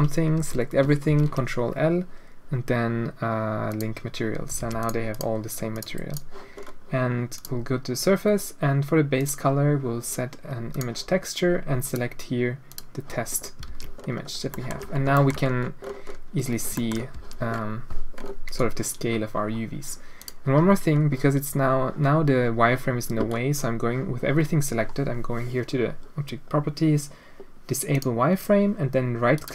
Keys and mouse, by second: 0.3 a, 1.0 ctrl+l, 4.6 alt+a, 4.8 click, 5.1 click, 5.7 click, 6.1 click, 7.3 click, 9.1-10.8 drag, 11.8 click, 12.8 click, 13.2 middle click, 13.7 alt+a, 13.9 middle click, 14.5 shift+middle click, 15.1 shift+middle drag, 16.7 shift+middle drag, 17.1 a, 20.2 click, 21.1-22.0 middle drag, 22.1-22.7 middle drag, 27.9 click, 29.3-29.5 drag.